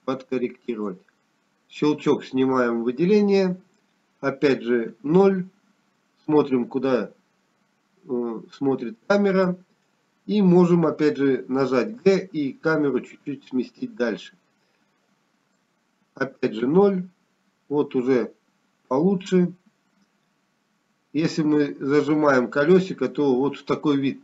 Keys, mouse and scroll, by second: 7.0-7.6 scroll down 1, 8.8 KP_0, 12.2 middle click, 14.8 g, 17.3 middle click, 24.1-24.2 scroll up 2.